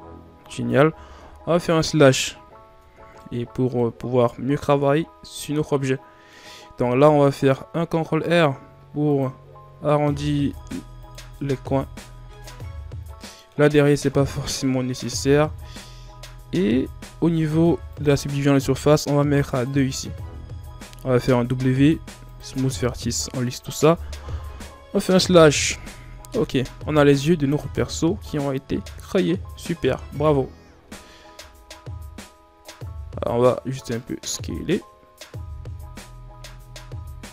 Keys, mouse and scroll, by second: 1.1 KP_Divide, 2.7 Tab, 3.1 middle click, 3.9-4.4 scroll up 1, 4.4-4.8 shift+scroll down 2, 4.8 scroll up 1, 5.8-7.6 middle drag, 7.6 ctrl+r, 11.2-14.0 middle drag, 14.0 Tab, 14.3 scroll down 2, 14.5-17.8 middle drag, 17.8-21.4 drag, 21.4 w, 22.8-24.1 middle drag, 24.1 KP_Divide, 25.4 KP_1, 25.9 Tab, 27.2 scroll up 2, 27.4 Tab, 28.2 a, 28.4-28.9 scroll down 3, 29.9 scroll up 2, 30.2 Tab, 30.5 a, 30.8 a, 31.3 s, 34.2 Tab, 34.5-35.2 scroll down 4, 35.6 shift+scroll down 1, 36.5-37.3 scroll up 1.